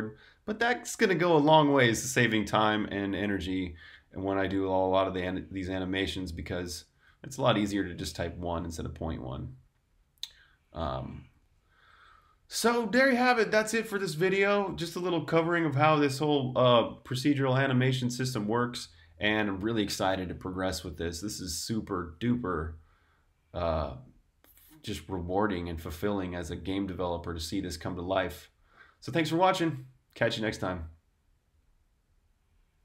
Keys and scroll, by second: 6.6 super+z.